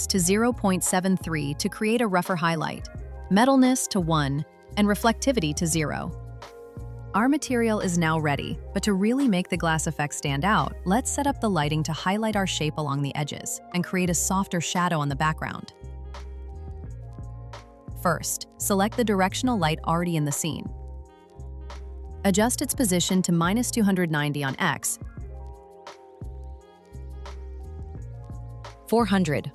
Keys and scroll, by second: 1.4 Return, 3.4 Return, 5.3 Return.